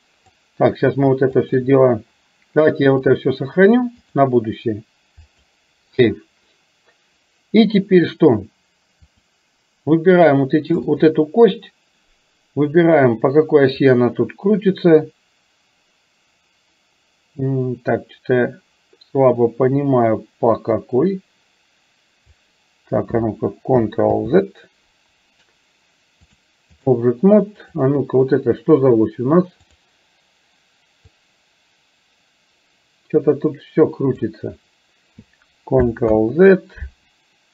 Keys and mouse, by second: 1.5 shift+click, 4.1-5.6 drag, 9.2 click, 14.1-22.3 drag, 24.2 ctrl+z, 26.3 click, 27.7 click, 29.7 click, 31.2-34.3 drag, 36.2 ctrl+z.